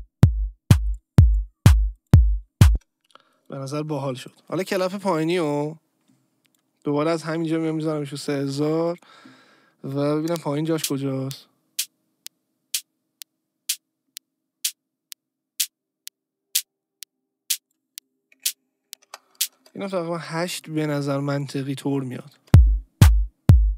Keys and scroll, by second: 2.7 space, 10.2 space, 19.0 Return, 19.5 space, 22.3 space.